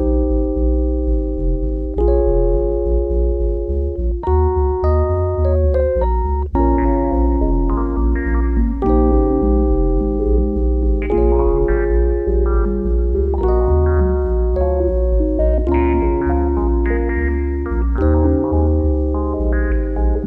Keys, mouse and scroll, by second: 12.0 Tab, 13.0 a, 13.2 a, 15.1 f, 16.4 Tab.